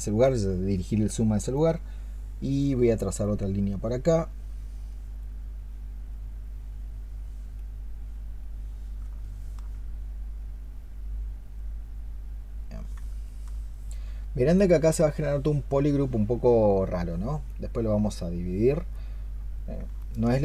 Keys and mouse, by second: 9.1 alt+click, 13.1 alt+click, 19.9 alt+click.